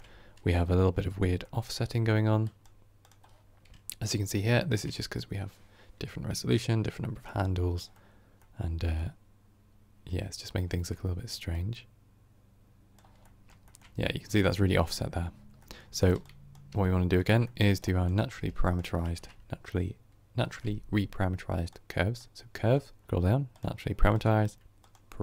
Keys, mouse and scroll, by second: 2.3 click, 3.9-11.5 middle drag, 11.5-13.1 drag, 13.1-24.0 middle drag.